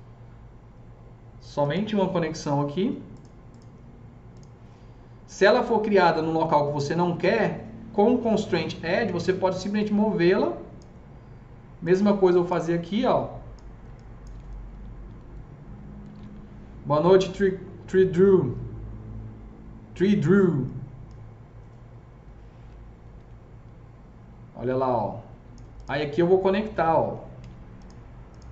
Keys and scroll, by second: 16.1 typing, 23.1 s, 26.6 alt+c, 27.3 alt+s.